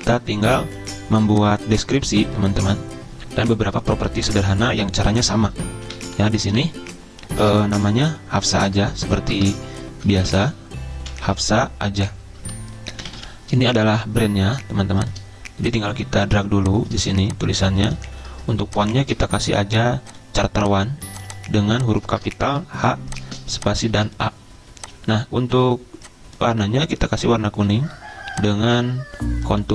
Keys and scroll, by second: 5.9-7.4 typing, 9.3-13.7 typing, 19.0 c, 22.5 h, 23.2 a.